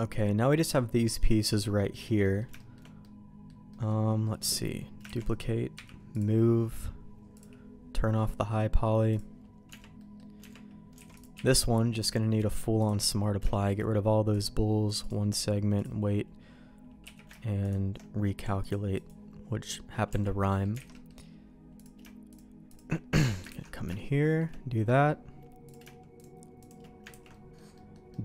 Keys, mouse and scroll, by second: 0.1 middle click, 1.5 middle click, 2.2 middle click, 2.6 shift+middle click, 3.0 middle click, 3.7 middle click, 5.2 shift+d, 5.7 m, 7.3 click, 9.1 click, 9.7 Tab, 10.0 middle click, 10.4 Tab, 11.0 alt+a, 11.1 click, 11.3 q, 13.5 shift+middle click, 14.3 click, 14.8 click, 15.4 click, 17.0 q, 18.6 click, 19.0 click, 19.6 middle click, 20.1 Tab, 20.4 middle click, 20.8 alt+a, 20.9 middle click, 21.8 click, 22.3 shift+click, 23.1 middle click, 23.5 ctrl+x, 23.9 shift+middle click, 24.8 middle click, 25.6 click, 26.2 shift+click, 26.6 shift+click, 27.1 ctrl+x, 27.3 middle click, 27.7 middle click, 28.1 middle click.